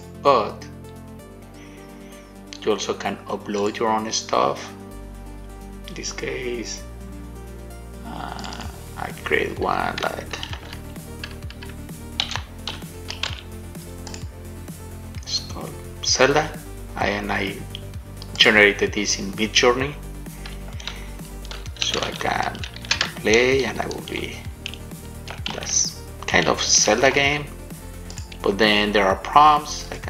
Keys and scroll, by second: 22.1 shift+w, 23.5-24.8 typing, 26.8-27.8 typing.